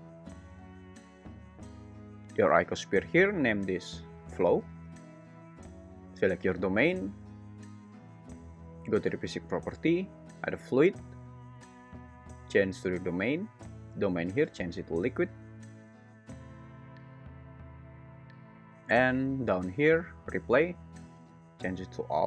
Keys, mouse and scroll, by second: 2.2 g, 2.9 Escape, 10.4-11.7 drag, 14.1-15.3 drag, 20.8-22.2 drag.